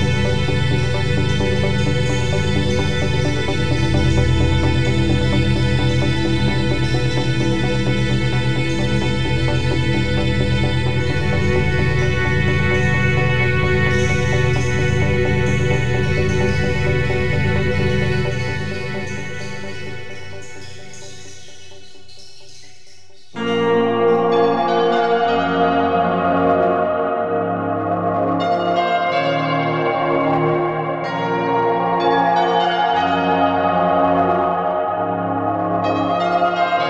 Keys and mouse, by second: 0.0-2.7 typing, 0.1 ctrl+r, 0.2 right click, 0.5 click, 1.1 click, 1.3 right click, 1.5 click, 1.7 Tab, 2.1 click, 2.9 click, 3.1 Tab, 3.3 click, 3.7 click, 4.0 g, 4.6 ctrl+e, 4.8 click, 5.0-7.4 typing, 5.8 ctrl+r, 6.0 click, 6.8 alt+a, 7.6 Tab.